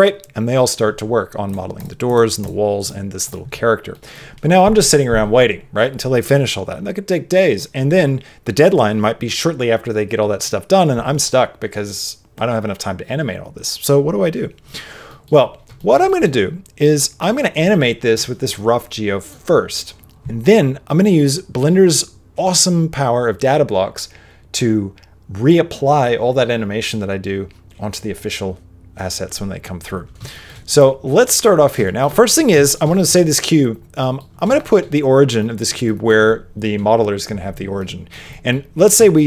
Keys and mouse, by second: 3.9 click, 3.9 middle click, 15.0 middle click, 15.7 shift+middle click, 16.0 middle click, 17.0 middle click, 18.5 middle click, 30.3 shift+middle click, 30.7 click, 31.2 middle click, 31.8 shift+middle click, 32.1 middle click, 32.6 shift+middle click, 32.8 middle click, 33.9 middle click, 34.5 shift+middle click, 35.3 middle click, 35.8 middle click, 37.7 middle click, 38.3 middle click, 39.0 shift+middle click.